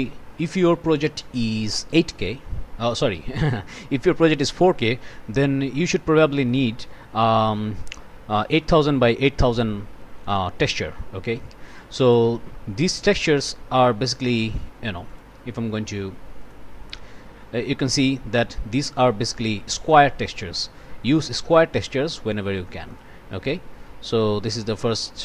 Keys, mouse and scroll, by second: 6.4 click, 14.1 right click, 15.1 click, 16.4 click, 22.9 click, 23.7 scroll down 1, 24.6-24.9 scroll down 1.